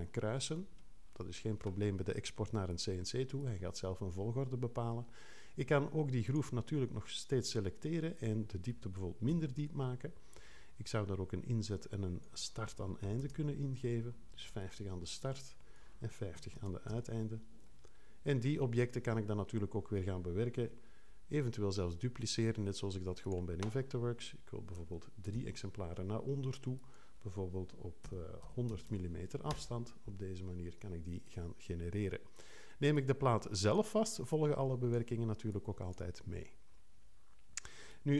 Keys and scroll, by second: 9.3 6, 12.8-13.7 typing, 16.1-17.0 typing, 20.6 5, 25.3 3, 28.0 -, 28.7 0, 29.5 Return.